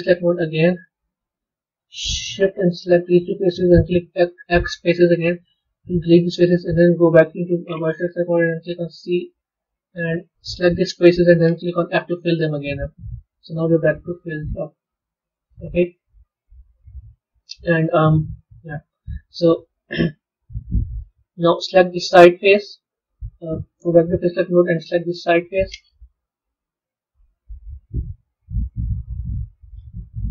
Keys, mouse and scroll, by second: 0.0 click, 2.3 shift+click, 2.9 shift+click, 6.2 click, 13.1-14.2 middle drag, 14.2 scroll up 2, 14.7-16.6 middle drag, 16.6-17.3 scroll down 2, 17.3-22.4 middle drag, 22.4 click, 23.9 click, 25.1 click, 26.4 KP_1, 27.3-27.9 scroll up 3, 27.9 middle click, 28.8-30.3 scroll down 1.